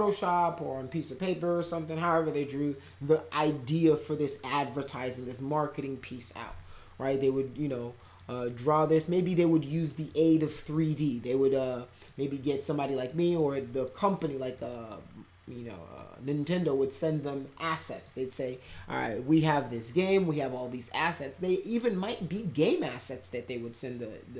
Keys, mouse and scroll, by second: 7.0 middle click, 8.0 middle click, 8.4 middle click, 9.0 middle click, 9.9 middle click, 10.7 middle click, 11.2 middle click, 11.7 middle click, 13.0 middle click, 13.8 middle click, 14.5 middle click, 15.9 middle click, 16.6 middle click, 18.0 middle click.